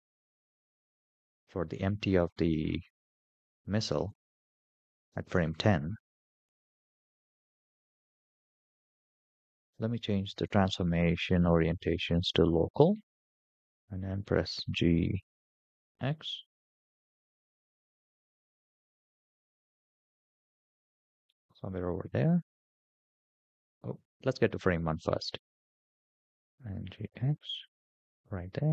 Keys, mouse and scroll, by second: 6.4 KP_0, 7.1-8.0 scroll down 7, 8.2-8.6 shift+middle drag, 9.4 click, 10.2-12.6 drag, 14.1 g, 23.2 click, 25.6 g.